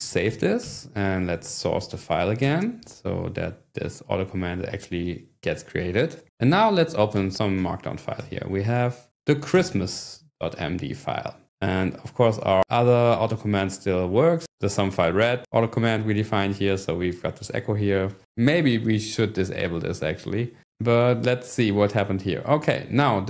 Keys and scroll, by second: 0.0-2.2 typing, 0.3 Return, 2.7 Return, 6.7 shift+;, 7.2 e, 7.7 space, 8.2 Tab, 9.6 Return, 20.6 Return.